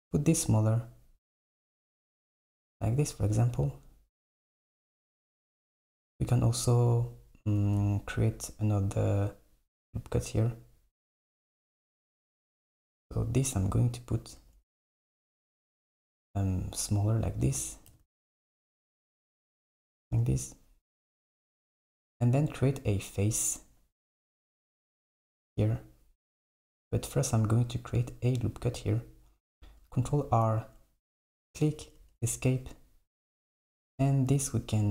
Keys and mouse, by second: 4.4 KP_1, 13.6 s, 15.0 s, 17.9 g, 20.1 Tab, 24.9 click, 26.6 click, 26.8 Tab, 30.0 ctrl+r, 33.8 KP_1.